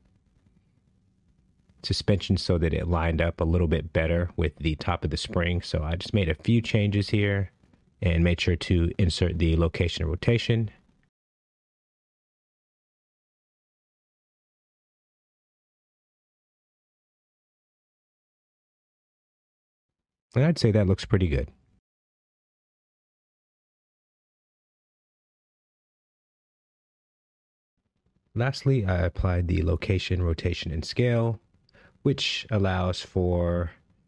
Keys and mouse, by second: 1.9 click, 3.0 shift+middle drag, 4.8 g, 5.3 z, 9.8 g, 10.5 z, 12.0 KP_Decimal, 12.3 KP_0, 12.6 KP_3, 13.9 Escape, 14.7-16.5 typing, 18.5 Escape, 19.2-21.0 typing, 23.5 KP_5, 25.0 KP_Enter, 28.1 i, 30.7 shift+middle drag, 31.3 space, 32.7-33.0 shift+middle drag.